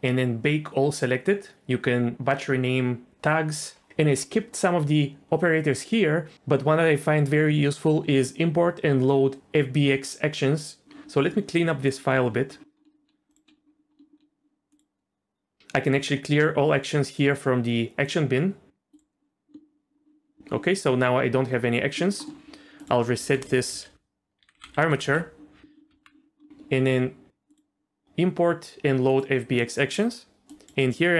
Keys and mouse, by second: 13.3 click, 14.8-18.9 drag, 23.2 Tab, 23.4 a, 24.4 alt+r, 24.5 alt+g, 24.8 alt+s, 25.0 Tab, 25.9 Tab, 27.6-29.2 drag.